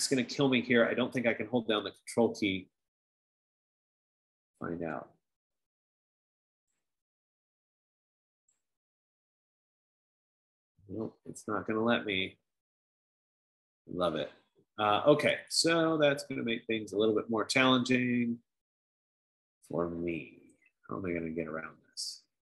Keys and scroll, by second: 20.7 F15.